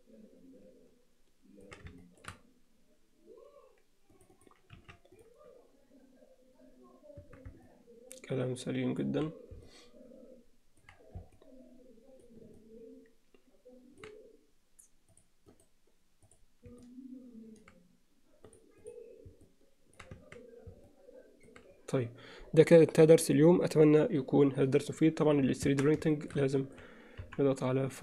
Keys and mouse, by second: 2.0 alt+shift+middle click, 4.4 click, 4.8 x, 7.4 Tab, 7.7-9.0 middle drag, 9.6-10.8 alt+middle drag, 11.4-12.2 alt+middle drag, 12.6-14.0 middle drag, 15.2 click, 15.6-16.5 right drag, 16.8-17.6 alt+middle drag, 18.5 click, 19.4-20.0 alt+middle drag, 20.3 Tab, 20.9 middle click, 25.8 Tab, 26.2 shift+middle click, 26.6 middle click, 27.2 KP_1.